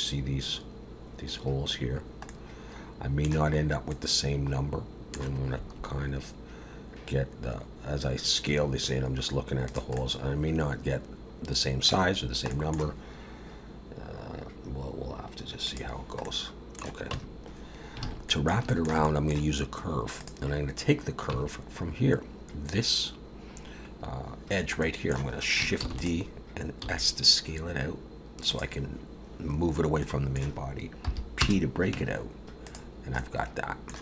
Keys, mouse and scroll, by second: 1.9 scroll down 1, 2.3 middle click, 3.6 scroll up 2, 3.9 middle click, 5.5 s, 9.9 middle click, 12.1-12.5 scroll down 2, 12.5 middle click, 15.6 click, 16.2 middle click, 17.1 Tab, 17.7 scroll up 2, 18.0 alt+a, 18.3 middle click, 18.7 shift+middle click, 19.0 middle click, 20.2 click, 21.3 Tab, 24.8 middle click, 25.8 shift+d, 26.8 s, 30.1 middle click, 31.0 p, 31.9 Tab, 32.6 click, 33.2 middle click.